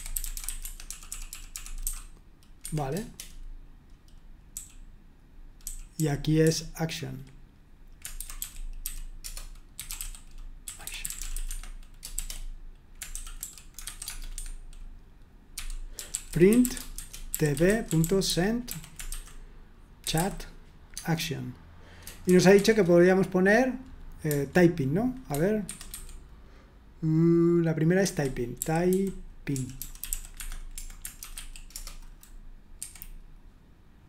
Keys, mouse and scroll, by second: 0.0-3.4 typing, 0.6 Escape, 2.6 Escape, 4.5-20.6 typing, 22.3 typing, 25.7 super+1, 25.9 super+2, 28.1 super+1, 28.5-31.7 typing, 32.8 F5.